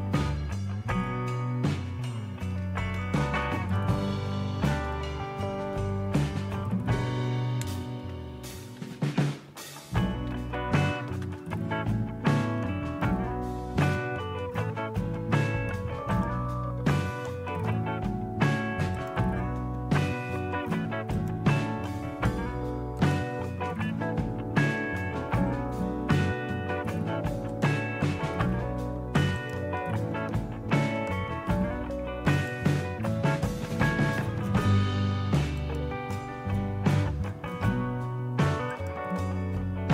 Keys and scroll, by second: 1.8-4.6 typing, 4.7 Return, 8.5-11.5 typing.